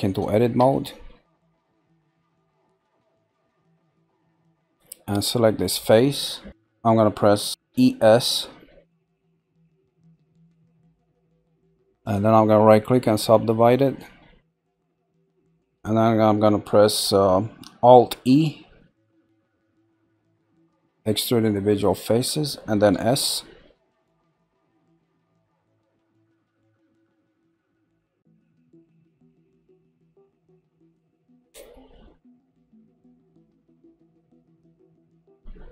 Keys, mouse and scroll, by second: 0.0 Tab, 0.5 Tab, 3.2 click, 3.5 Tab, 4.6 click, 12.0-14.9 right drag, 14.9 shift+click, 19.4 alt+e, 27.8 s, 31.9 scroll up 1.